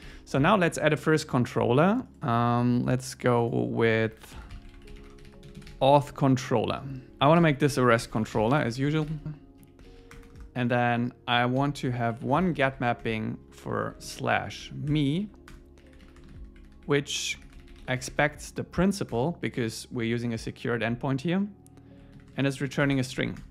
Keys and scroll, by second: 0.1 super+w, 0.8 super+1, 7.1 Return, 7.4 alt+l, 9.2 Return, 9.6 Down, 9.9 super+Right, 10.1 Return, 10.9 Up, 11.6 alt+l, 13.1 Tab, 13.5 Left, 14.1 alt+shift+Left, 14.9 Escape, 15.1 Right, 15.5 Return, 19.1 Return, 19.5 Right, 23.2 alt+8, 23.4 Return.